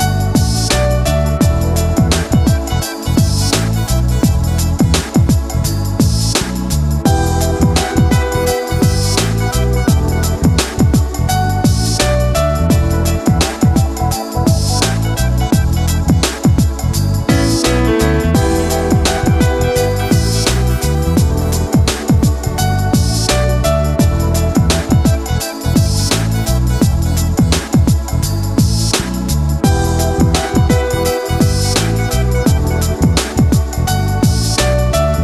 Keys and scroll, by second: 3.1 ctrl+c, 5.1 ctrl+v, 6.9 ctrl+g, 17.5 ctrl+z.